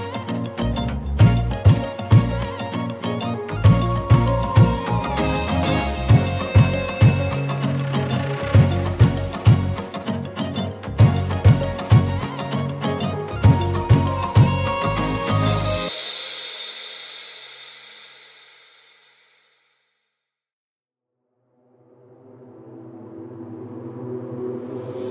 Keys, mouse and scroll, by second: 0.3 ctrl+z, 0.6 ctrl+i, 0.9 right click, 1.3 m, 1.7 Tab, 3.8-4.5 middle drag, 4.9-5.3 scroll down 11, 5.3 middle click, 6.0-6.4 drag, 6.4 Tab, 6.5 a, 6.9 alt+s, 7.4 Tab, 7.5 click, 7.6 middle click, 8.0 click, 8.6-10.6 scroll up 2, 11.7-12.4 middle drag, 12.9 click, 13.0-13.4 scroll up 2, 13.4 Tab, 14.2 a, 14.6 m, 16.0 Tab, 24.6-24.9 shift+middle drag, 24.9-25.1 scroll up 2.